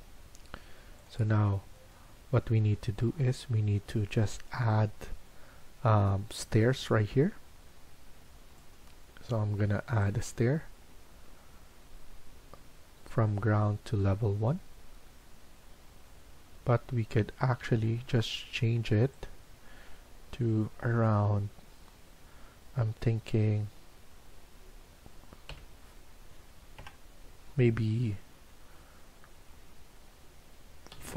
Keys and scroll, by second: 18.6 Escape, 25.4 5, 26.7 BackSpace, 30.9 4.